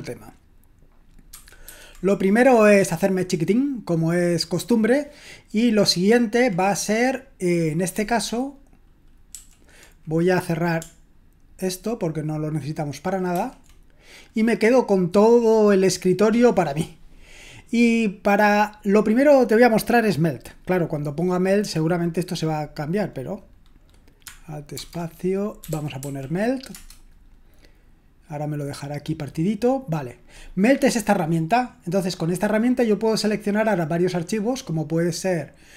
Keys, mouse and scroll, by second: 1.3 ctrl+2, 1.7 ctrl+1, 9.3 super+l, 13.3 ctrl+w, 24.8 alt+space, 25.4-26.5 typing, 26.7 Return.